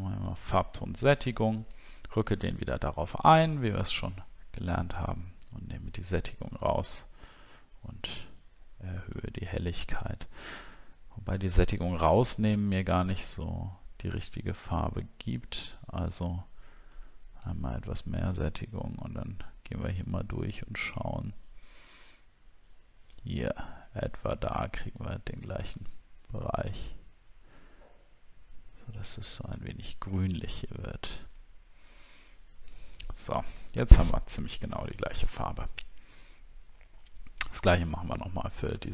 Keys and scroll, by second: 37.8 alt+Tab.